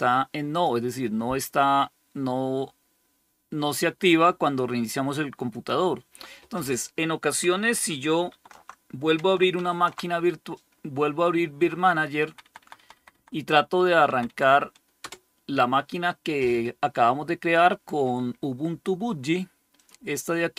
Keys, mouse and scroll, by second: 5.4 click, 8.2 super+3, 9.4 alt+super+d, 11.5 Down, 11.7 Down, 11.8-12.1 Down, 12.5 Down, 12.7 Down, 13.0 Down, 13.9 Down, 14.9 Return, 19.6 click.